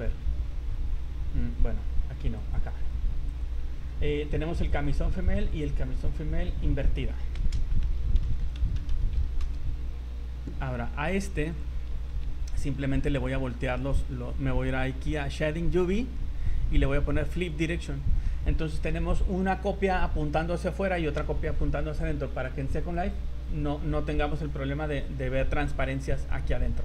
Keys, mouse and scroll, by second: 0.2-1.0 scroll down 13, 1.0-1.4 scroll up 9, 2.4 click, 2.9 click, 3.3 click, 4.7 click, 5.2 click, 5.4 click, 11.5 click, 11.9 Tab, 12.2 a, 12.7 a, 13.4 scroll down 5, 14.2-14.5 scroll up 3, 15.9 click, 17.5 click, 18.3 Tab, 18.7 z, 22.9 click, 25.1-25.4 scroll up 4, 25.5 middle click, 26.0 middle click.